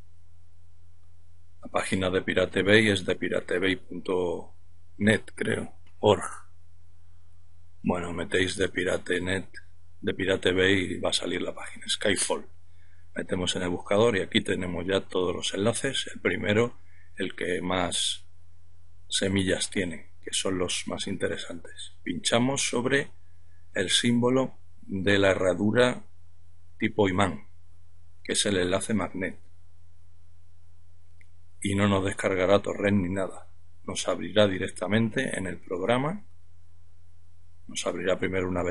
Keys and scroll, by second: 6.8-10.0 typing, 11.3 Return.